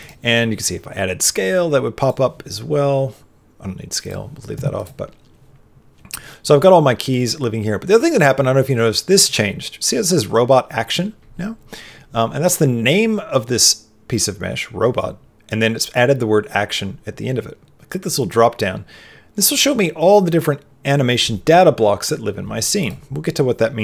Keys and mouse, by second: 1.9 click, 3.9 click, 18.2 click.